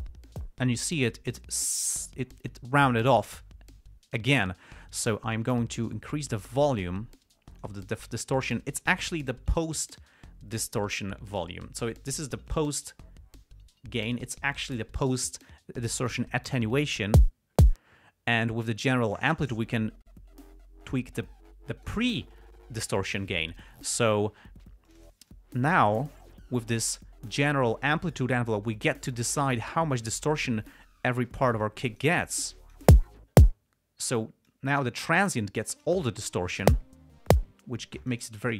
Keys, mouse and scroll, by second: 6.3-8.2 drag, 12.8-14.6 drag, 15.1-16.8 drag, 19.3-22.4 drag, 25.3 click, 25.8-27.2 drag, 29.1 click, 31.1-31.9 drag, 31.9-33.2 drag, 34.8-36.4 drag, 38.3-38.5 drag.